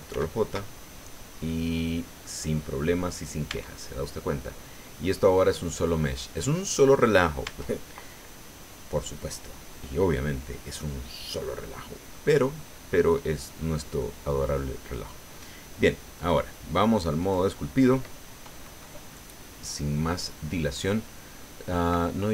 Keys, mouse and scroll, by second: 0.1 ctrl+j, 1.1-2.4 drag, 2.5-2.9 scroll up 1, 3.5 Tab, 7.5 Tab, 12.1 middle click, 13.0 middle click, 16.2 click, 17.2 click.